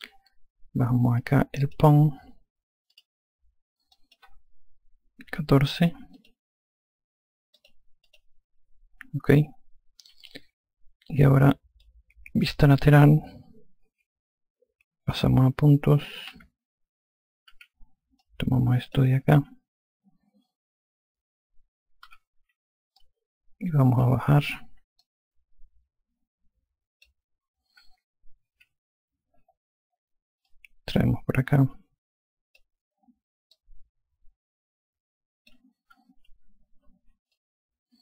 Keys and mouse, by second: 1.5 alt+click, 3.2 click, 5.7 KP_1, 6.4 click, 7.8 click, 10.5 alt+click, 14.1 F3, 17.8 5, 18.5 click, 22.3 F1, 23.2 alt+click, 25.3 click, 27.3 alt+click, 28.1 F2, 30.7 click, 33.8 click, 36.1 F1, 37.6 alt+click.